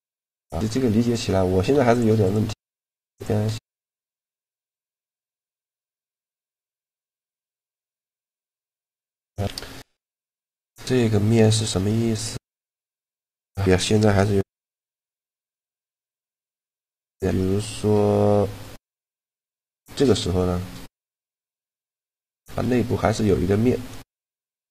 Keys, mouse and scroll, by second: 0.4 middle click, 0.9 Tab, 1.4 x, 1.9 click, 2.3 x, 2.5 right click, 2.6 click, 3.0 shift+a, 7.7 alt+g, 8.6 shift+c, 9.1 KP_Decimal, 11.8 Tab, 13.0 z, 14.1 ctrl+r, 15.9 f, 16.6 a, 18.6-20.8 drag, 20.8 z, 23.5 z.